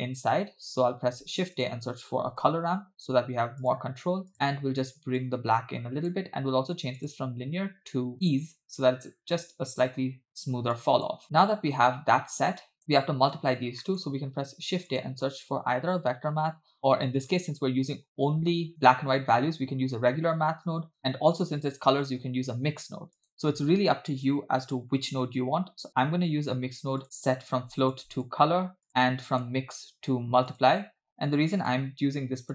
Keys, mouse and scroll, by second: 1.0 shift+a, 5.2 click, 7.0-8.6 drag, 10.8-11.3 drag, 11.7-12.2 scroll down 2, 12.7 click, 12.8 middle click, 13.9 middle click, 14.2 shift+a, 22.4 shift+a, 27.8 click, 28.2-28.9 drag, 29.3-30.7 drag, 31.0 scroll up 2, 31.7-32.5 drag.